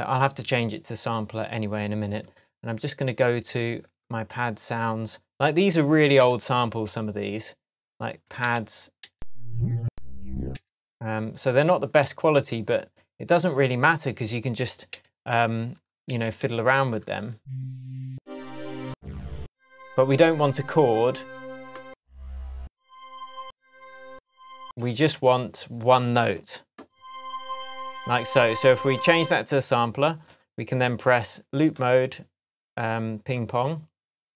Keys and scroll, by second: 6.2 Right, 8.4 Right, 10.5 Left, 16.1 Down, 24.6 space.